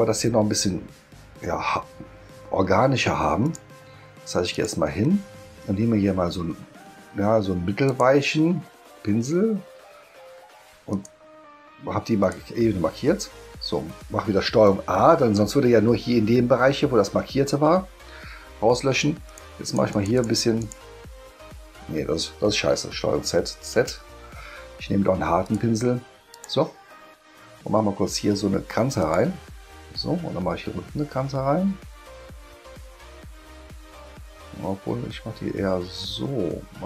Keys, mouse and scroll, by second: 3.4 click, 4.5 click, 7.9 click, 10.9 click, 12.2 click, 14.7 ctrl+a, 19.3 click, 19.6 click, 19.9 click, 20.2 click, 20.6 click, 22.9 ctrl+z, 23.5 ctrl+z, 25.4 click, 26.3 click, 29.0 click.